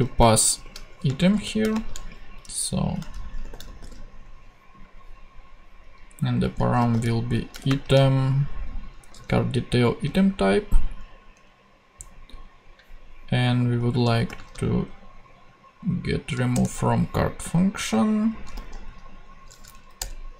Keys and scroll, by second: 0.2-1.7 typing, 3.2-4.4 typing, 6.5-8.1 typing, 9.1 super+c, 10.1 super+v, 11.3 Down, 14.3 space, 16.5 Return, 18.3-19.1 typing, 20.0 Return.